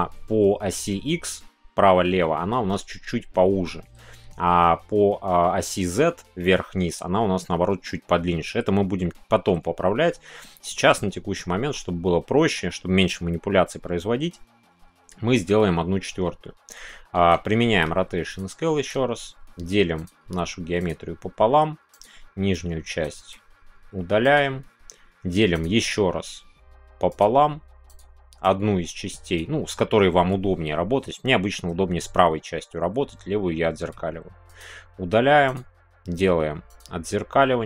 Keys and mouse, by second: 16.6 Tab, 17.2 Tab, 17.6 ctrl+a, 18.8 Tab, 19.9 click, 20.8 click, 21.9 click, 22.6 click, 25.5 click, 25.5 x, 27.1 click, 27.8 click, 28.4 click, 35.4-36.7 drag, 35.4 x.